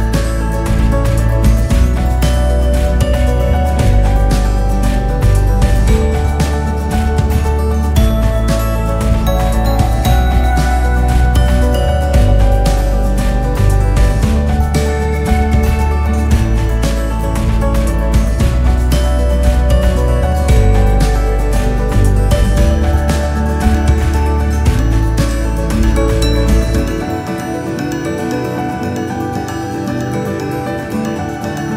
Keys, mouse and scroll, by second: 4.9-5.5 scroll up 4, 5.5-6.4 scroll down 9, 6.6-7.6 scroll up 8, 7.8-8.3 scroll down 1, 8.3 scroll up 5, 8.6 scroll down 4, 10.2-10.7 scroll down 1, 14.6 scroll down 2, 15.0 scroll up 5, 15.9 s, 18.9-20.2 scroll down 5, 20.2 r, 22.6 g, 30.7 g.